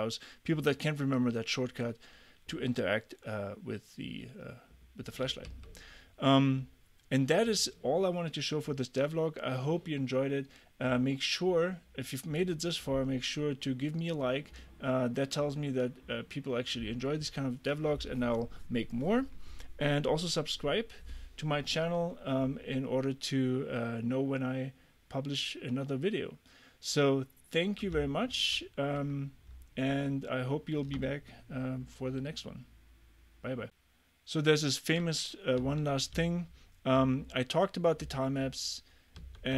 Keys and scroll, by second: 5.5 a, 28.5 super+`, 35.7 w, 36.2 d, 38.1 w.